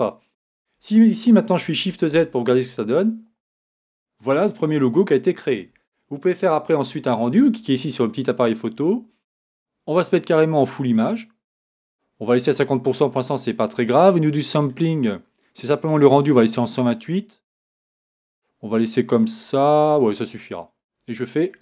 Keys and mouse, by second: 1.8 shift+z.